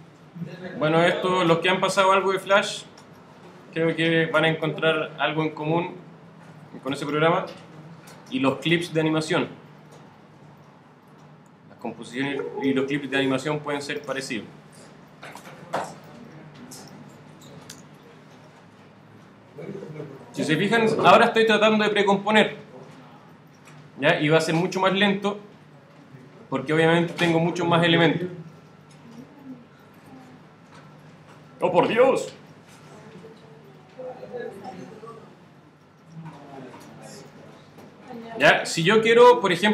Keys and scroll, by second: 7.8 shift+super+d, 8.9 shift+super+d.